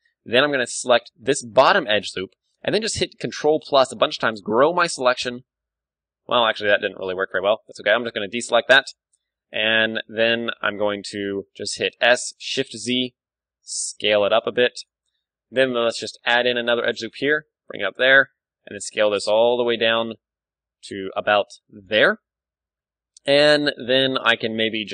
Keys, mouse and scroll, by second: 1.9 right click, 3.0 ctrl+super+KP_Add, 3.2 ctrl+super+KP_Add, 3.3 ctrl+super+KP_Add, 3.4 ctrl+super+KP_Add, 4.0 ctrl+super+KP_Add, 4.2 ctrl+super+KP_Add, 4.8 ctrl+KP_Add, 5.3 ctrl+KP_Add, 5.5 ctrl+KP_Add, 6.0 KP_1, 6.4-9.0 middle drag, 6.7 z, 7.3 b, 9.0 z, 10.3-12.6 middle drag, 12.0 s, 14.8-16.8 drag, 15.3-17.1 middle drag, 15.3 a, 16.2 ctrl+r, 17.8-19.7 drag, 18.1 g, 21.8-23.6 drag, 23.0-24.8 middle drag, 23.9 z, 24.8 z.